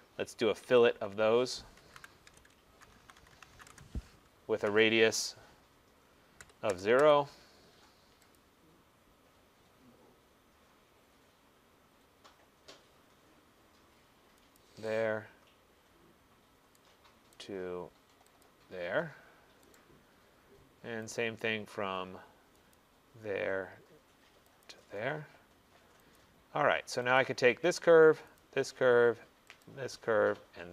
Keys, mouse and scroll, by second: 0.5 middle click, 0.7 Escape, 1.8-3.8 typing, 4.9 typing, 6.5 Return, 6.5-7.3 typing, 8.4 click, 14.6 click, 17.4 right click, 18.5 click, 19.8 right click, 21.2 click, 22.8 click, 24.7 click, 26.2 click, 27.2 click, 28.5 shift+click, 29.7 shift+click.